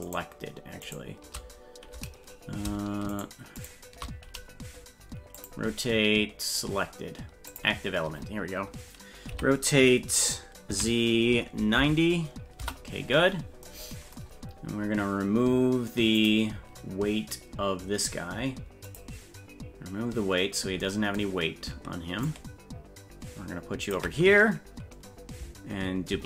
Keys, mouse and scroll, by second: 0.0 shift+right click, 0.8 shift+right click, 3.1 shift+right click, 3.6 shift+right click, 5.3-7.6 drag, 9.3 r, 16.1 click, 18.8 click, 22.2-23.9 ctrl+drag, 26.1 shift+d.